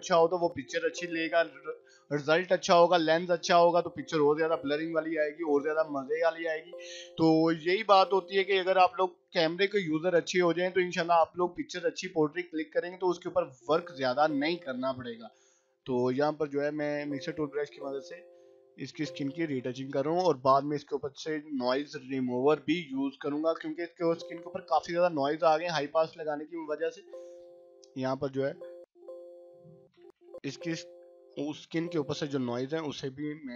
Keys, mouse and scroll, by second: 0.2 [, 0.4 [, 0.6 [, 0.9-3.3 drag, 3.1 [, 3.6-4.2 click, 4.1 ], 4.4-5.0 click, 4.9 [, 5.1 [, 5.3 click, 6.4 ], 6.9 click, 7.1 scroll down 1, 7.7 ], 8.4-13.3 drag, 13.9 [, 14.2-16.4 drag, 16.6 scroll up 1, 16.7 ], 17.4 ], 17.6-20.9 click, 18.7 ], 18.8-20.8 drag, 20.8 ], 21.0-23.6 drag, 23.6 [, 23.9 [, 24.0-26.4 click, 24.6 [, 24.7-26.3 drag, 26.3 [, 26.6 [, 26.8 [, 26.9-27.5 drag, 28.2-30.0 typing, 28.4 click, 28.8 click, 29.1 click, 30.3-30.9 click, 31.5 ], 31.9 click, 33.1 scroll down 1, 33.4 scroll up 1.